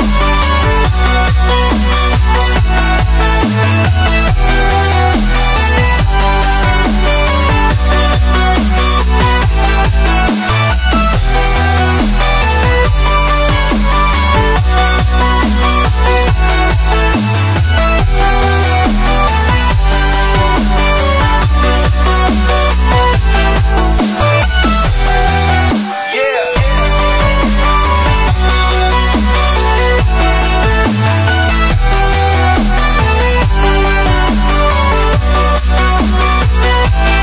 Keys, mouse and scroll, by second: 0.7 click, 3.2 scroll up 2, 3.7-4.8 scroll down 5, 4.4 middle drag, 4.8 shift+middle drag, 4.9-6.6 scroll up 4, 5.1-5.4 middle drag, 6.6 Tab, 7.1 click, 7.3 Tab, 7.4-7.8 scroll up 2, 7.8 shift+middle click, 8.5 3, 9.2 alt+shift+click, 10.9 shift+click, 11.2 middle click, 11.5-12.3 scroll up 1, 12.3 shift+d, 12.9-13.2 middle drag, 13.2 p, 13.9 Tab, 14.1 click, 14.5 Tab, 15.2 a, 15.6-19.5 middle drag, 19.5 e, 20.6 click, 21.1 Tab, 21.3 click, 22.4 click, 24.8-25.5 scroll down 3, 25.5-25.8 scroll down 1, 25.8-26.2 middle drag, 26.2 scroll down 1, 26.4-29.0 shift+middle drag, 29.0 click, 29.4 Tab, 30.1 ctrl+r, 33.5 ctrl+r, 34.7 ctrl+b.